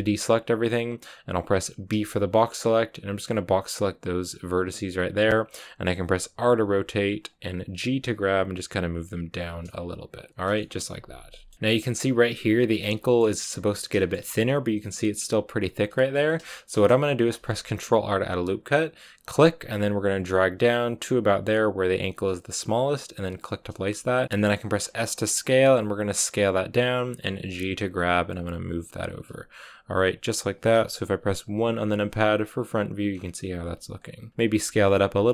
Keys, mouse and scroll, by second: 4.2 b, 6.3 r, 7.5 g, 10.1-10.5 scroll down 6, 10.5-11.5 shift+middle drag, 11.5-12.7 scroll up 2, 12.7 scroll up 1, 12.9-16.1 shift+middle drag, 16.1-16.4 scroll down 1, 16.4 shift+middle click, 17.2 ctrl+r, 23.8-24.2 scroll up 1, 24.2 s, 24.5 s, 27.2 g, 29.8 g, 31.4 KP_1, 32.4-33.0 scroll down 4, 33.0 scroll up 4, 33.5 s, 34.1 g, 34.6 s.